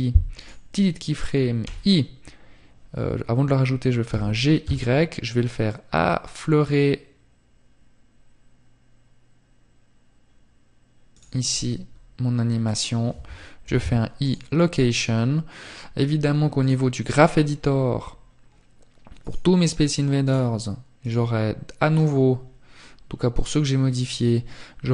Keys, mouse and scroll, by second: 9.7 click, 9.7-10.7 scroll up 2, 10.7-11.5 scroll down 2, 11.9 i, 14.8 click, 16.2 click, 17.4 click, 18.5 right click, 19.2 click, 20.2 click.